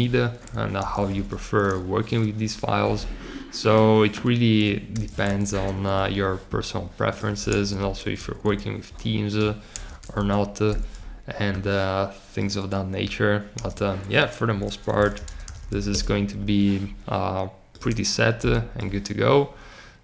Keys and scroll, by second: 0.7 super+r, 1.0 1, 4.8 super+r, 5.2 2, 7.4 super+r, 8.1 3, 9.6 super+r, 9.9 4, 13.5 super+r, 14.8 b, 15.2 t.